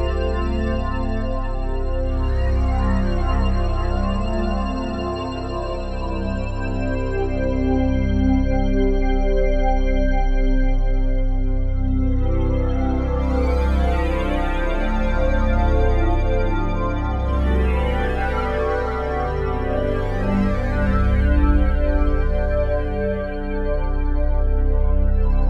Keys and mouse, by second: 1.0 click, 1.8 click, 3.9 alt+click, 4.7 alt+shift+click, 5.3 ctrl+alt+click, 6.6 click, 7.2 click, 7.7 alt+click, 9.0 alt+click, 9.9 alt+click, 11.6 alt+click, 11.9 click, 13.4-15.5 drag, 17.9-19.8 drag, 21.4 ctrl+alt+click, 22.4 alt+click, 24.3 click.